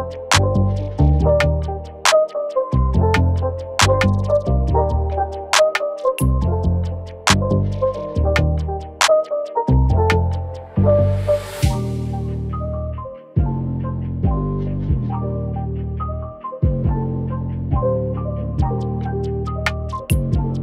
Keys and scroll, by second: 1.2 ctrl+t, 7.5 ctrl+t, 12.4 ctrl+t.